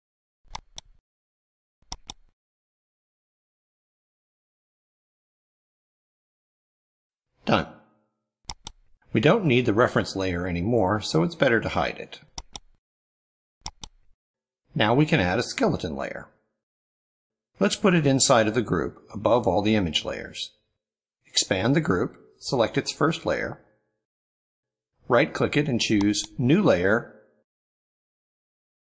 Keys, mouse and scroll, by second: 0.3 click, 0.6 click, 1.0 click, 1.9 click, 2.2 click, 2.4 click, 2.9 click, 3.2 ctrl+click, 3.7 click, 4.3 middle click, 4.6 ctrl+scroll down 1, 4.8-6.1 ctrl+middle drag, 8.3 click, 10.0-10.7 drag, 12.3 click, 13.6 click, 16.7 click, 18.2 scroll up 2, 24.4 click, 25.8 right click.